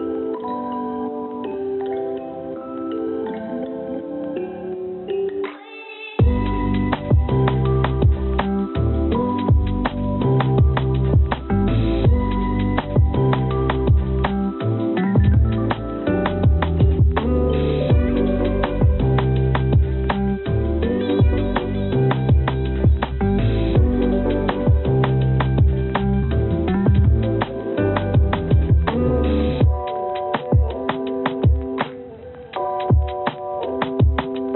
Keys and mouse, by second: 3.5-6.4 drag, 17.7 click, 18.9 click, 19.1-23.6 drag, 25.3-26.8 drag, 29.7 click.